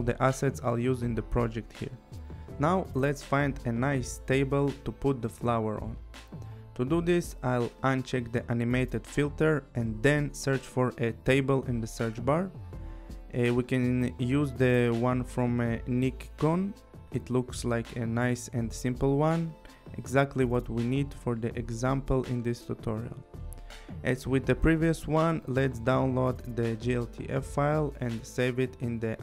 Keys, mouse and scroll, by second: 1.0 click, 4.9 click, 6.3 click, 8.3 click, 9.0 click, 9.6-11.2 typing, 13.4 click, 14.9 click, 17.4 scroll, 18.3 click, 18.7 scroll, 19.4 scroll, 20.3 scroll, 20.4 click, 24.0 click, 25.8 click, 28.4 click.